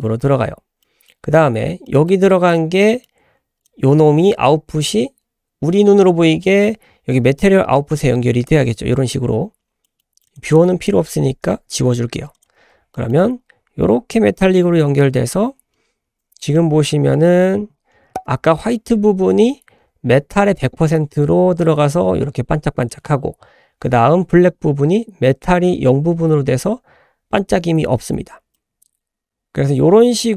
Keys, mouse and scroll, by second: 0.3 scroll down 2, 0.8 middle click, 1.9 middle click, 2.4 scroll up 1, 2.8 middle click, 3.7-8.6 drag, 9.8 scroll down 1, 9.8 middle click, 10.5-10.9 drag, 11.8 Delete, 12.3 click, 12.7 scroll down 1, 12.9 middle click, 16.5 shift+middle click, 18.5 shift+middle click, 28.2 scroll down 1, 28.6-30.3 middle drag.